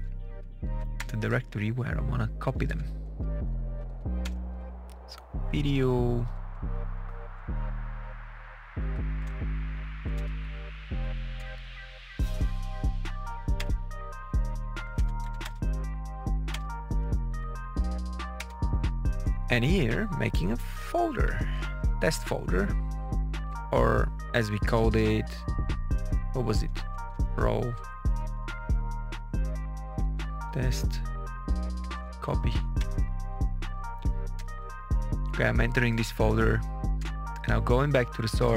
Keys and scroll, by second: 0.6 Up, 0.9 Return, 1.7 Down, 2.6 Page_Up, 2.9 Home, 3.1 Return, 3.6 Down, 4.1 Return, 4.6 Down, 5.7 Up, 7.2 Up, 8.0 Down, 9.0 Page_Up, 9.2 Return, 9.9 Up, 10.1 Return, 10.4 Down, 11.3 Return, 12.3 Down, 13.4 Return, 14.0 Down, 14.6 Up, 14.8 Return, 15.7 Down, 16.4 Return, 17.5 Down, 18.3 Return, 21.1 F7, 26.8-32.4 typing, 32.7 Return, 34.2 Return, 36.9 Tab.